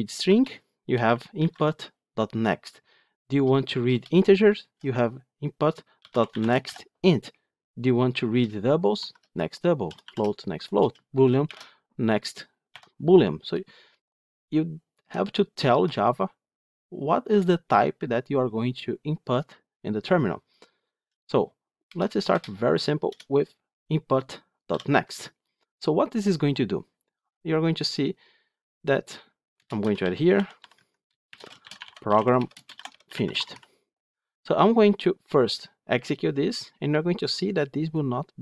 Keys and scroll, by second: 23.0 Return, 25.0 Return, 30.6 Tab.